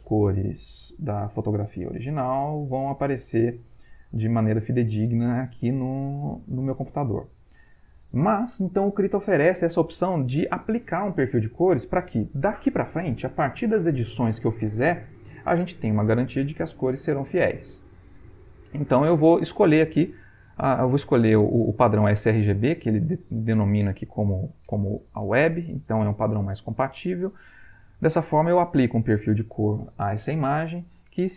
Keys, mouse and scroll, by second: 27.1 click.